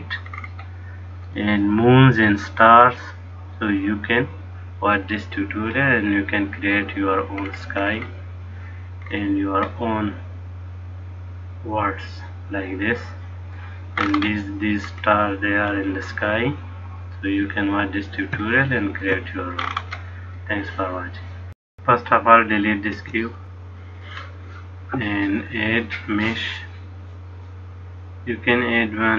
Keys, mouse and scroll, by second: 1.7 middle click, 7.7-8.7 scroll down 7, 9.4-10.1 scroll down 3, 10.1 middle click, 10.1-10.9 scroll down 1, 14.3-15.2 scroll up 7, 15.2-15.6 scroll down 2, 16.2 middle click, 18.8 shift+middle click, 19.9-20.5 scroll up 7, 21.8 click, 23.1 x, 25.5 click.